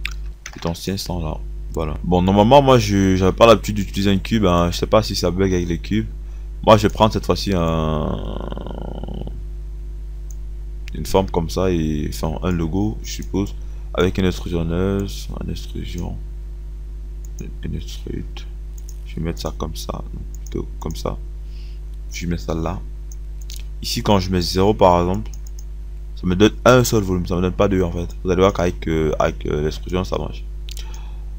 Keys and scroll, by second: 0.0 KP_5, 1.6 KP_0, 25.4 KP_0.